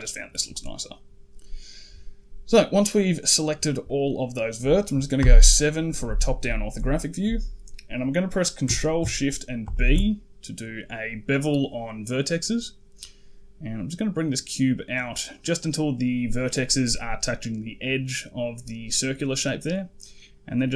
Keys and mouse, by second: 0.2-1.3 middle drag, 2.5 middle click, 3.7 middle click, 5.0 KP_7, 6.1 shift+middle click, 6.8 shift+middle click, 9.5 ctrl+shift+b.